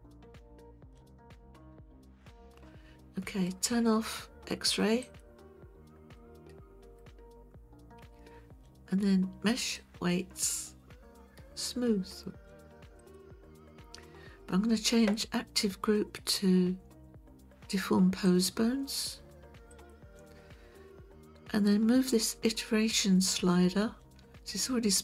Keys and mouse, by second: 5.1 click, 6.2-7.0 middle drag, 8.0 KP_1, 9.6-13.2 drag, 18.3-19.9 drag.